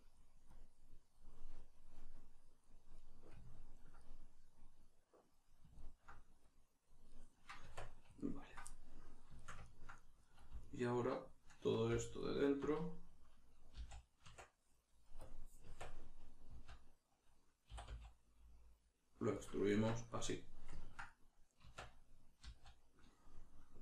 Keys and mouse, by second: 1.9 middle click, 2.4 click, 3.0-6.5 middle drag, 6.5 click, 7.1-10.6 middle drag, 7.7 Tab, 10.6 alt+right click, 12.2 alt+right click, 13.7 z, 15.2-19.4 drag, 15.6 Tab, 19.7 Tab, 20.1-23.8 middle drag, 21.6 Tab.